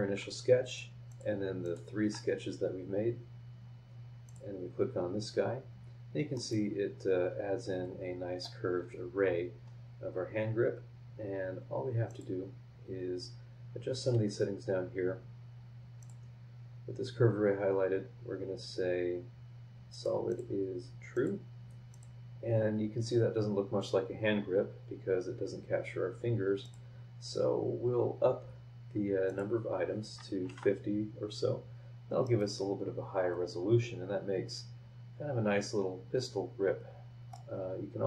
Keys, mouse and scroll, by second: 0.7 ctrl+click, 1.1 ctrl+click, 1.6 ctrl+click, 2.2 ctrl+scroll down 1, 4.2 click, 6.3 scroll down 1, 6.3-8.6 middle drag, 6.5-8.6 drag, 6.5-8.6 right drag, 9.2 scroll up 1, 12.1 click, 16.0 click, 19.9 click, 20.3 click, 21.1 click, 21.9 drag, 26.6 click, 29.3 click, 30.4 KP_5, 30.4 KP_0, 32.2-37.5 middle drag, 32.4-37.5 drag.